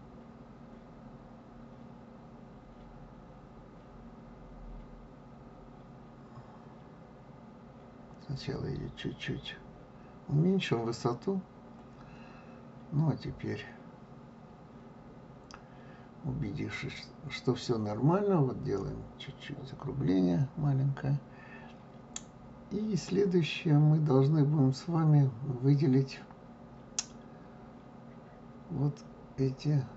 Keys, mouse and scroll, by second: 14.3-15.8 scroll up 2, 16.5 KP_3, 19.4 s, 23.0-26.0 middle drag, 29.0-29.9 drag.